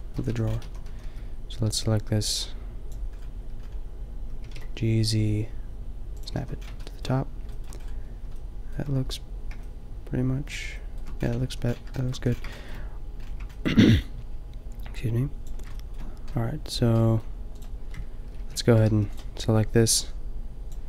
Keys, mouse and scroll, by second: 0.3 a, 0.7 a, 0.9 a, 1.1 b, 3.2 click, 4.4 g, 6.5 a, 11.5 a, 12.2 a, 15.8 click, 16.6 click, 17.5-18.9 drag, 18.4 ctrl+l, 18.9 g.